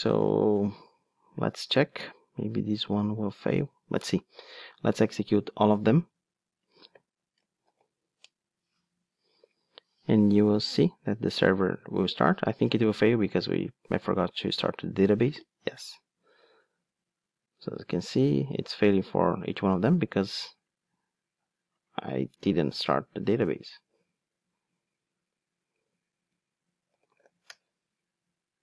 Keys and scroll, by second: 23.4 alt+F12.